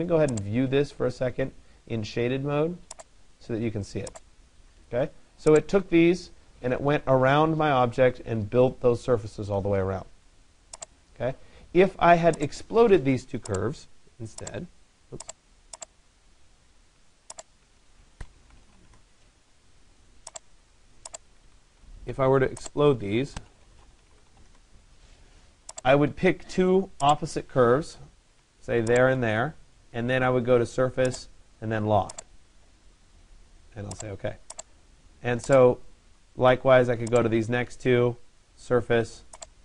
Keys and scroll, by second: 18.5 Return, 24.5 Return.